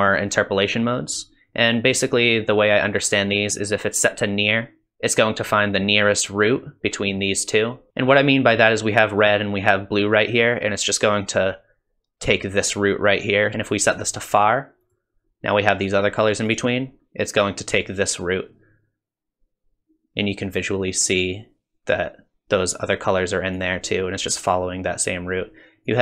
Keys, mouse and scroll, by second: 13.8 click, 16.5 click, 23.6 click, 25.9 click.